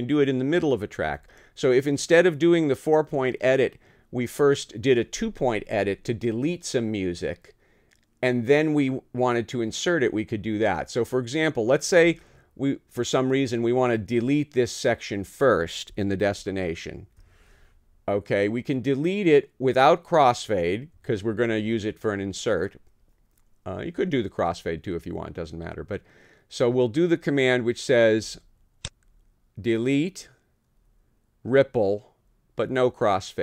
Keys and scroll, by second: 16.3 t, 20.9 Home.